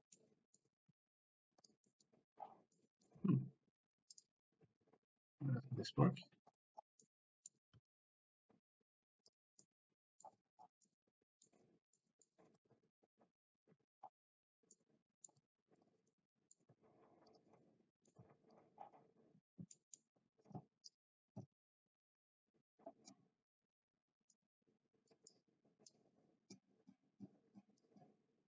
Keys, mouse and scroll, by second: 0.2 middle click, 0.8 g, 1.8 middle click, 2.8 middle click, 3.5 g, 4.6 r, 6.1 Escape, 7.2 middle click, 9.1 r, 9.8-10.2 middle drag, 11.0-11.5 middle drag, 11.9-12.4 middle drag, 12.5 r, 12.7 z, 13.7 Escape, 14.8 middle click, 15.6 g, 15.8 click, 16.1 middle click, 16.7 g, 17.3 click, 17.6 middle click, 18.6 click, 18.6 g, 19.7 middle click, 21.0-24.3 drag, 25.2 click, 25.9-27.8 drag.